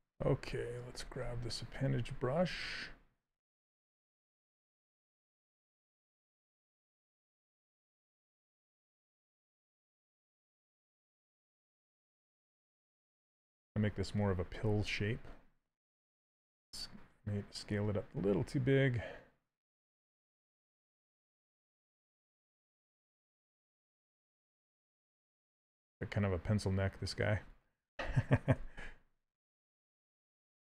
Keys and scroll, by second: 6.8 s, 15.8 w, 28.2 q, 30.4 s.